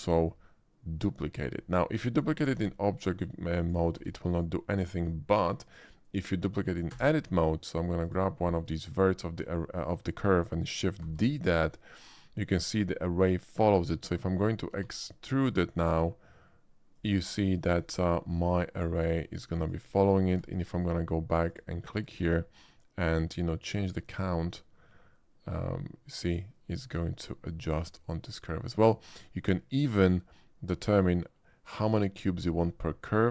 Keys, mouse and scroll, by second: 2.4 shift+d, 3.5 click, 3.9 x, 4.3 click, 5.6 click, 6.9 Tab, 8.0 click, 8.4 middle click, 11.0 shift+d, 13.6 click, 14.7 e, 16.9 click, 18.0 r, 19.6 click, 20.3 Tab, 21.5 click, 22.1 shift+middle click, 24.3-29.7 shift+drag.